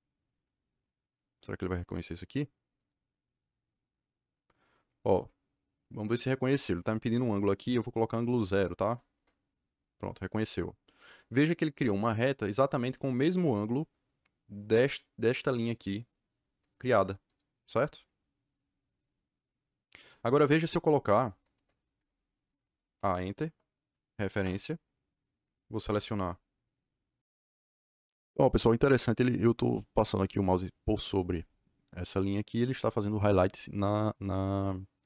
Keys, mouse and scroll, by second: 2.7 click, 9.1 KP_Enter, 17.2 click, 21.5 KP_Enter, 21.9 KP_Enter, 22.9 a, 23.0 KP_Enter, 24.2 r, 24.4 Return, 27.2 Escape.